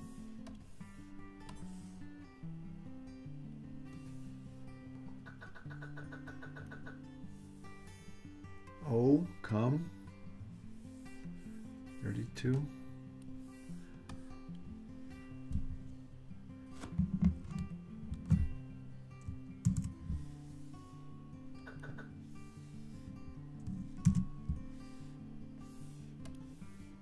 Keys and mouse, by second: 0.6 click, 1.5-3.6 drag, 4.9-6.9 drag, 12.7-13.4 drag, 14.1-15.5 drag, 19.7 super+c, 21.7 click, 24.1 super+v, 26.4 click.